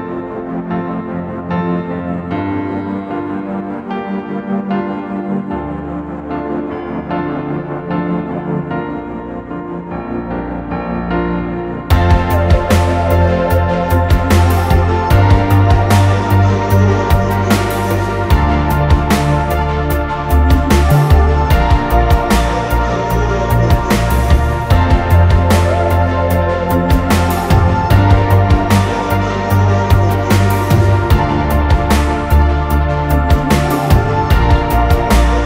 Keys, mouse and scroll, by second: 4.8-6.7 typing, 7.0 double click, 28.2 typing.